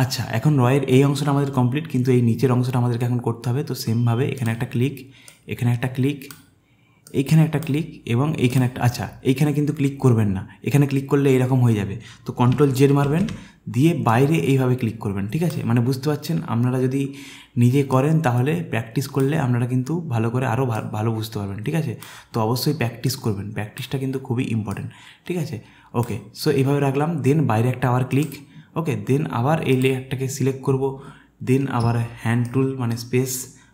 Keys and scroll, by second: 13.0 ctrl+z, 31.8 space.